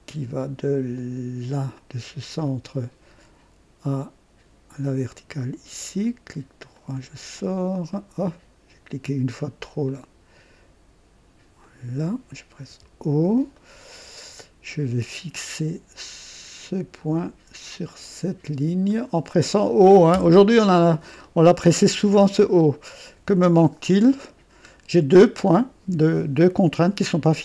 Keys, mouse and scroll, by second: 1.7 click, 2.4 right click, 5.1 click, 5.8 right click, 6.7 right click, 7.9 right click, 9.8 click, 11.6 click, 12.4-12.7 typing, 13.5 right click, 15.1 scroll up 1, 16.9 click, 18.8 click, 20.1 typing, 21.2-21.5 scroll down 1, 21.8-24.9 right drag, 23.5-25.0 typing.